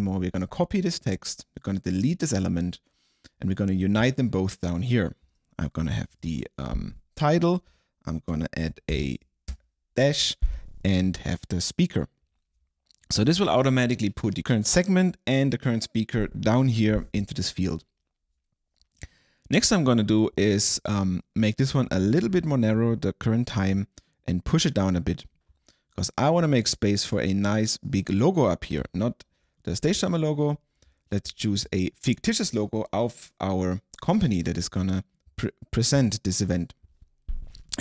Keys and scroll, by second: 6.2 super+v, 8.4 space, 9.0 alt+-, 9.6 space.